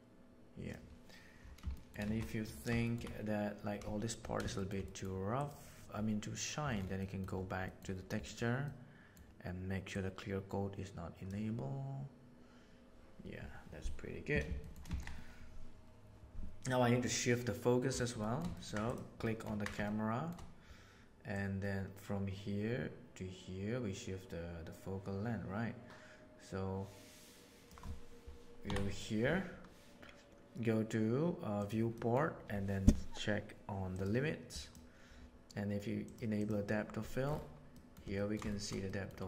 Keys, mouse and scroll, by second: 1.7 shift+middle drag, 2.0 alt+a, 2.2 middle drag, 2.8 middle click, 4.5 middle click, 4.8 middle click, 5.3 click, 7.0 middle drag, 7.7 middle click, 8.6 middle click, 10.0-11.3 drag, 14.6 shift+middle click, 14.9 alt+a, 18.2 shift+middle click, 18.5 ctrl+middle click, 18.8 middle click, 19.2-19.6 ctrl+middle drag, 19.8-20.2 shift+middle drag, 21.3-27.7 middle drag, 28.6 Down, 31.6 click, 31.9 middle click, 33.9 click, 34.5 drag, 36.0 click, 36.3 click, 37.7 middle click, 38.1 ctrl+middle click, 38.4 shift+middle drag, 38.8-39.1 middle drag.